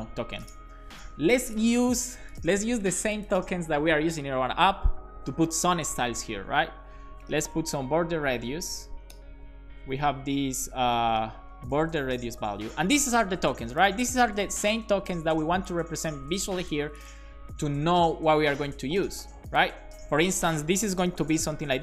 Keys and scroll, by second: 6.4 Return, 7.1-8.2 typing, 9.1 Return, 10.7-12.9 typing, 20.8-21.8 typing.